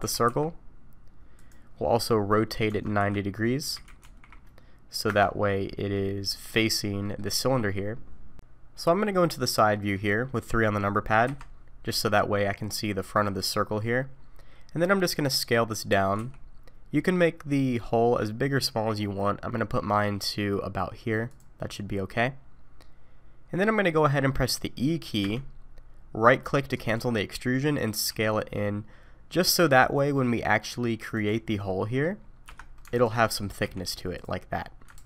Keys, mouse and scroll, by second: 0.0 g, 2.7 Tab, 3.0 r, 5.9 middle click, 7.0 middle click, 9.7 middle click, 11.2 KP_3, 12.0-12.8 scroll up 2, 14.2-16.2 scroll up 2, 16.2 s, 21.6-22.4 scroll up 3, 25.2 e, 28.1 s, 31.7 middle click, 32.2 scroll down 2, 32.5 3, 33.0 alt+click, 33.2-33.6 scroll down 2, 33.6 e, 34.9 ctrl+z.